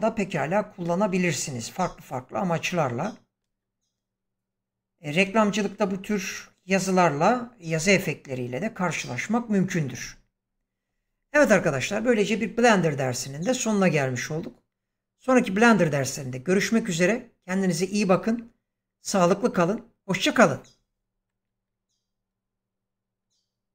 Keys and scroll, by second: 3.3 space, 5.1 space.